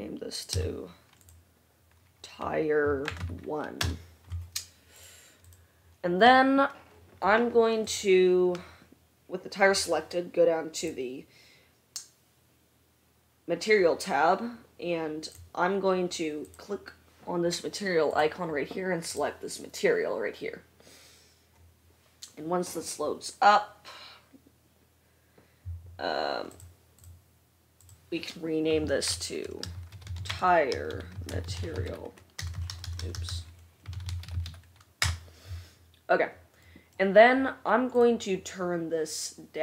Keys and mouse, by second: 0.0 F1, 0.7 F2, 5.9-8.0 drag, 8.4-10.9 drag, 11.0-16.9 drag, 32.6 BackSpace, 32.8 BackSpace, 33.1-38.3 drag, 33.1-38.3 middle drag, 33.1-39.6 right drag, 33.1 BackSpace, 33.4 BackSpace.